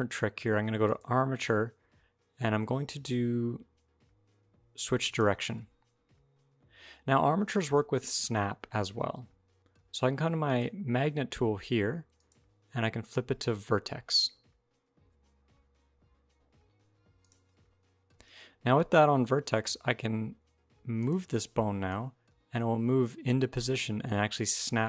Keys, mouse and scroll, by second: 0.6 click, 10.3 click, 12.0 click, 20.8 click, 21.7 click.